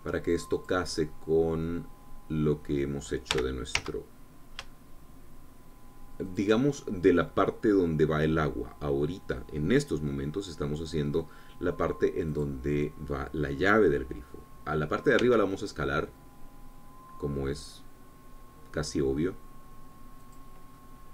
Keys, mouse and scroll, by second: 1.3 click, 1.8-3.7 middle drag, 4.1 g, 4.6 z, 5.5-7.1 shift+middle drag, 7.1-8.4 shift+drag, 11.9 click, 13.2 click, 16.0 s, 21.0 click.